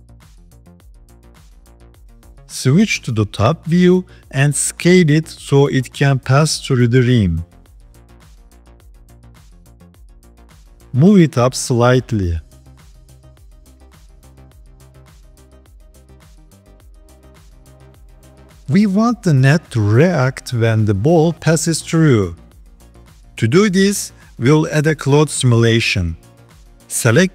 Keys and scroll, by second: 2.7 KP_7, 5.0 s, 12.7 g, 18.1 KP_7, 19.6 s.